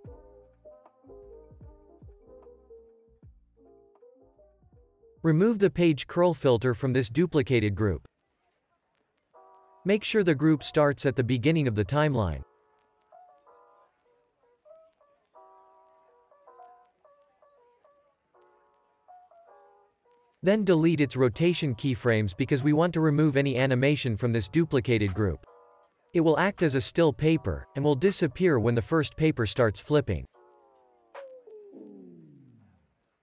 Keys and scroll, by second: 2.9 o, 7.1 Delete, 21.3 Delete, 22.6 Delete.